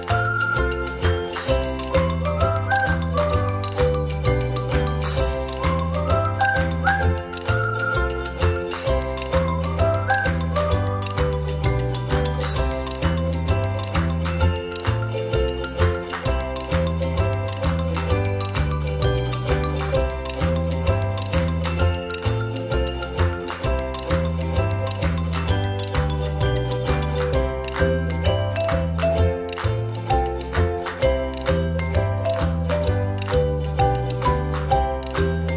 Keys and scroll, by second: 16.2 Delete, 31.6 space, 33.5 space.